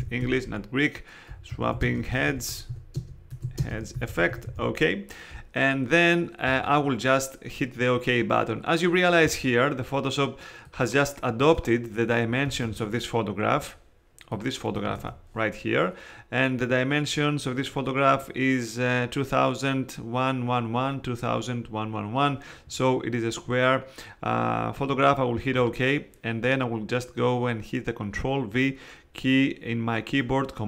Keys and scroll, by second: 0.0-5.0 typing, 12.6 super+Tab, 14.9 super+Tab.